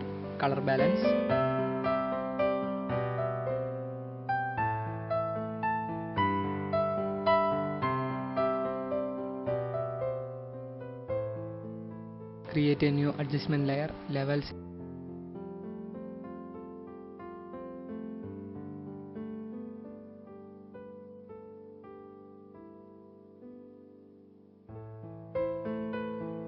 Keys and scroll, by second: 3.5 ctrl+alt+0, 4.1 KP_0.